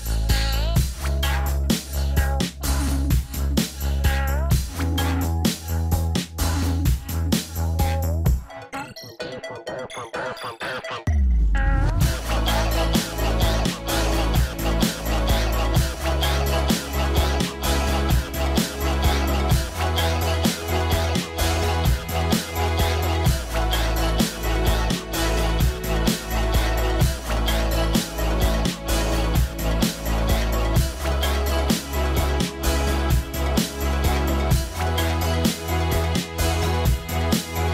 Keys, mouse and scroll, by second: 0.1 right click, 4.5 right click, 4.6 scroll up 1, 5.0 middle click, 5.6 scroll down 1, 5.8 middle click, 10.0 middle click, 12.6 scroll down 1, 13.1 middle click, 13.4-15.3 scroll up 1, 26.6-26.9 scroll up 1, 27.0 middle click, 37.3-37.7 scroll up 2, 37.4 middle click.